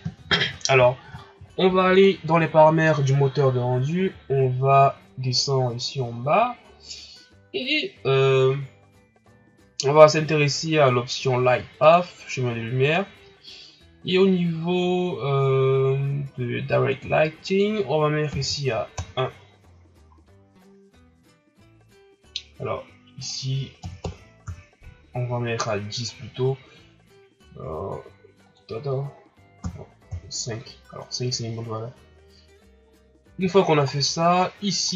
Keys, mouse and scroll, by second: 18.9-20.6 drag, 20.6 scroll up 4, 21.6 scroll up 1, 23.2-26.5 drag, 28.7-31.4 drag, 31.4 scroll up 2, 32.8 scroll down 5, 33.5 shift+scroll up 6, 33.9 scroll down 1, 34.3 scroll up 2, 34.8 right click.